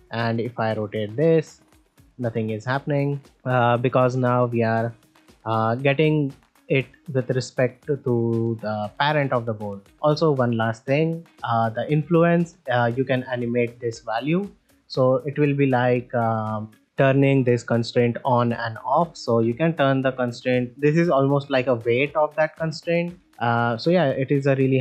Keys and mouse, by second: 0.9 r, 2.2 r, 5.8 g, 9.0 click, 11.2-14.1 drag, 18.5-23.2 drag.